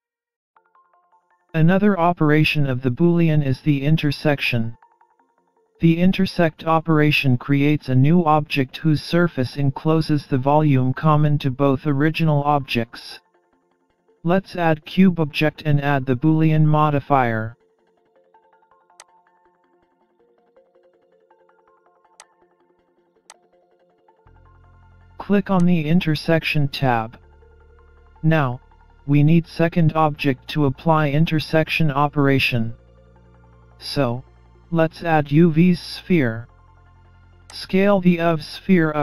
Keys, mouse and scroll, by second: 13.9 Delete, 14.8-16.5 scroll down 6, 15.6-16.5 scroll up 1, 16.5-16.9 scroll up 1, 17.5 shift+a, 20.3 middle click, 22.2 click, 25.6 click, 29.2-30.6 scroll up 1, 30.6 scroll up 1, 34.9 shift+a, 38.6 middle click.